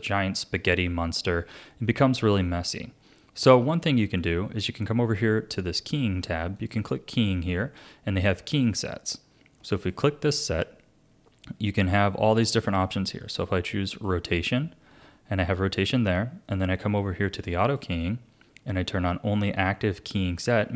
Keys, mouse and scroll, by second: 6.6-9.7 drag, 17.6-20.7 drag.